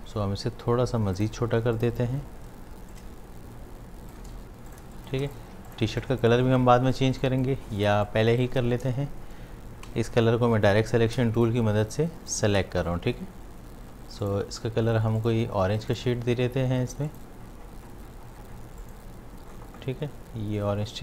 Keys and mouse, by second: 1.2 click, 2.9-4.3 alt+drag, 4.3 shift+v, 4.7 click, 4.9 space, 5.0 click, 5.5 space, 5.7 ctrl+alt+click, 7.1 space, 7.2 click, 7.6 space, 7.8-9.8 ctrl+drag, 9.8 a, 10.7 click, 11.4 shift+click.